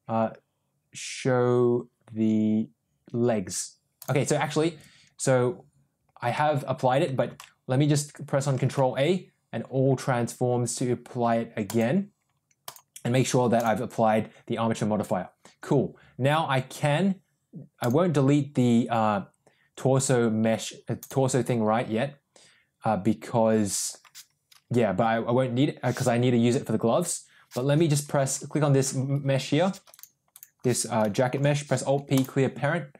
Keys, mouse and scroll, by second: 7.1 ctrl+a, 12.6 click, 13.5 click, 20.9 click, 30.3 click, 31.2 alt+p.